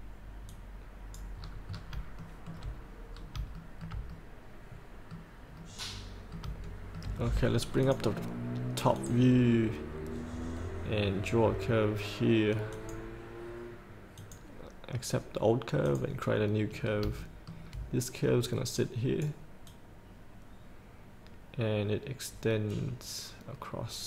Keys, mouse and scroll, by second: 0.7 click, 1.7 scroll up 1, 2.4 shift+middle click, 3.3 scroll up 1, 3.8 shift+middle click, 4.3-5.5 middle drag, 6.8 shift+middle click, 8.0 click, 10.4-10.9 scroll down 1, 12.9 click, 17.0 scroll up 1, 17.4 shift+middle click, 18.0 scroll down 1, 18.9-24.0 drag.